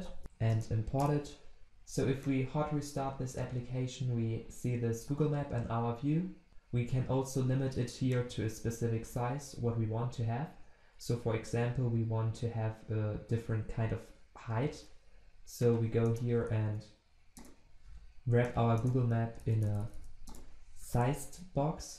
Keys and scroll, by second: 0.5 alt+Return, 16.1 alt+Return.